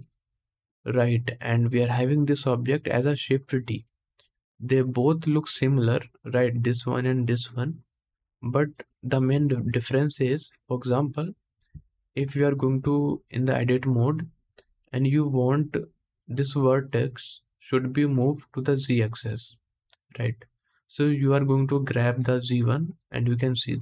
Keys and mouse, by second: 11.4 Tab, 11.9 Tab, 12.5 Tab, 15.0 click, 15.1-22.1 middle drag, 22.1-23.8 drag.